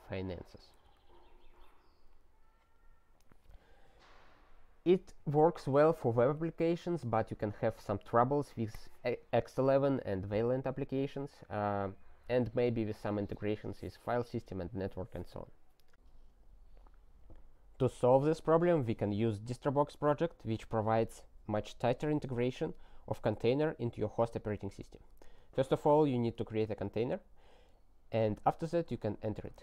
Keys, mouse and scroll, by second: 0.9 alt+w, 2.2-5.2 scroll down 20, 15.9 s, 25.3 ctrl+a, 25.6 ctrl+space, 25.6 ctrl+e, 26.4 ctrl+g, 28.1 super+t, 29.5-29.6 typing.